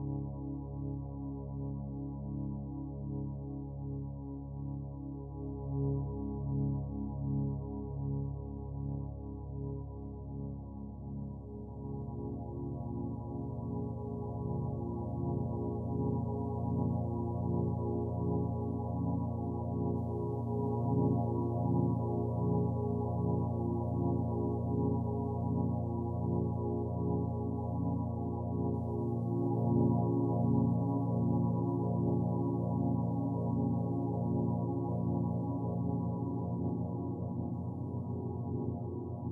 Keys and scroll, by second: 30.6-34.1 typing, 37.5-37.9 typing.